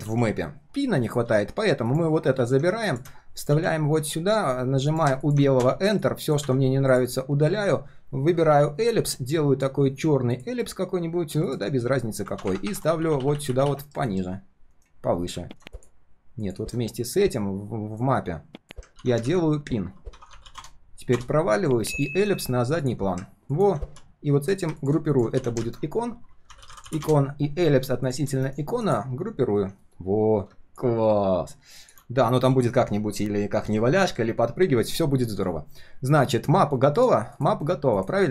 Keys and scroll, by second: 0.0 ctrl+s, 2.3 ctrl+c, 3.5 ctrl+v, 13.8 ctrl+[, 14.0 ctrl+[, 14.7 ctrl+], 19.2 ctrl+g, 19.6 ctrl+r, 22.4 [, 25.3 ctrl+g, 25.6 ctrl+r, 28.4 alt+h.